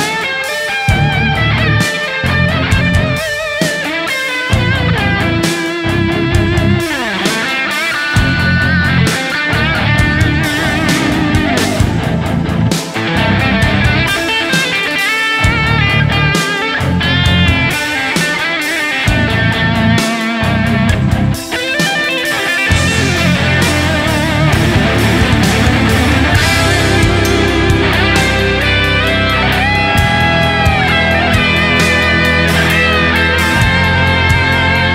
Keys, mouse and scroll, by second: 1.6 alt+right click, 1.9 alt+click, 3.0 alt+click, 4.7 typing, 6.6 alt+right click, 8.5 typing, 9.6 double click, 10.3 alt+right click, 14.2 alt+right click, 14.6 alt+right click, 14.9 alt+right click, 21.0 ctrl+s, 21.3 ctrl+s, 22.9 ctrl+d, 24.5 shift+click, 27.8 shift+double click, 29.2 shift+click, 31.6-32.4 typing, 32.5 right click, 34.0 typing.